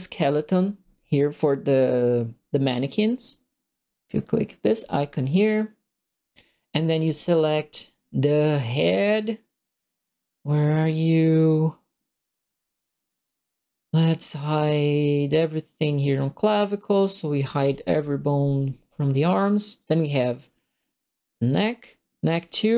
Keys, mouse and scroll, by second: 4.7 click, 16.0 click, 17.6 click, 19.9 click, 22.3 click.